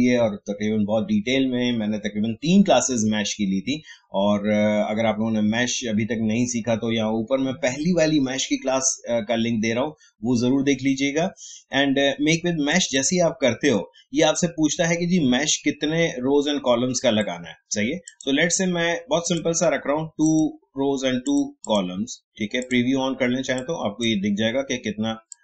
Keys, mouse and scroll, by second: 12.7-25.4 drag.